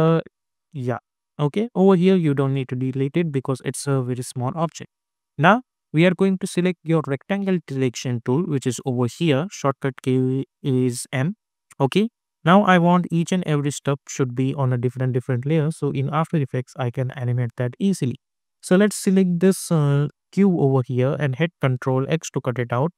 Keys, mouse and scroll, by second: 4.7 alt+scroll up 1, 4.8-5.1 ctrl+scroll down 1, 6.9 click, 18.8-22.0 drag, 22.0 ctrl+x.